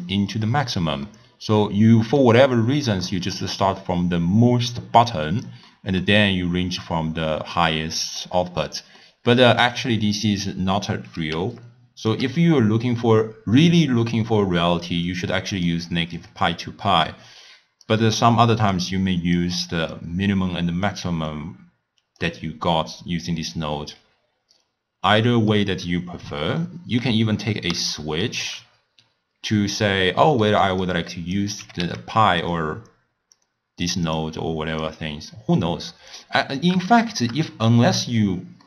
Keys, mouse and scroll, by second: 1.1-6.4 middle drag, 6.4-7.1 scroll down 2, 7.1-7.6 scroll up 3, 7.6-8.4 middle drag, 8.4-9.0 scroll down 5, 9.0 scroll up 1, 9.1-10.1 middle drag, 10.1-10.6 scroll up 1, 11.4 d, 11.6 right click, 12.1 d, 15.1 drag, 16.2 drag, 17.9 drag, 19.4 click, 20.0-24.3 drag, 25.6-28.5 middle drag, 28.5 scroll up 1, 28.7-30.3 scroll down 5, 30.3-30.9 middle drag, 30.9 click, 31.6 g, 33.4-34.2 drag, 34.4 click, 35.4 click, 36.2-38.6 middle drag.